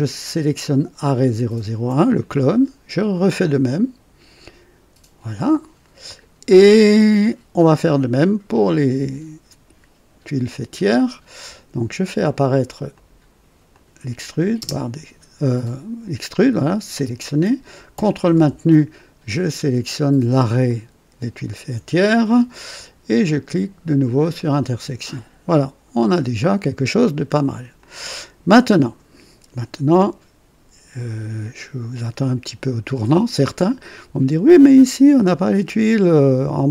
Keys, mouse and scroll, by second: 1.1 ctrl+click, 3.3 click, 12.9 click, 13.7 click, 14.5 space, 15.6 click, 20.6 ctrl+click, 24.3 click, 26.0-26.4 scroll up 1, 26.9-27.3 scroll down 1, 27.7-33.3 drag.